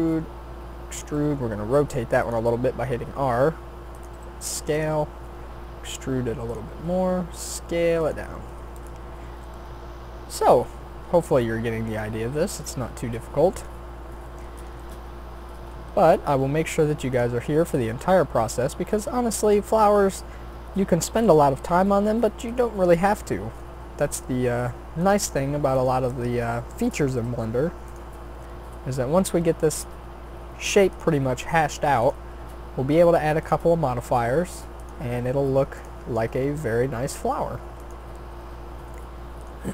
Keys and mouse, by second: 1.1 r, 2.7 s, 4.1 g, 5.5 e, 6.7 s, 9.1 middle click, 16.0 shift+d, 18.0 r, 19.7 e, 21.4 s, 23.3 middle click, 23.8 e, 25.3 s, 26.0 e, 27.2 r, 28.2 s, 29.9 e, 31.4 r, 32.3 s, 33.6 e, 35.1 r, 36.1 s.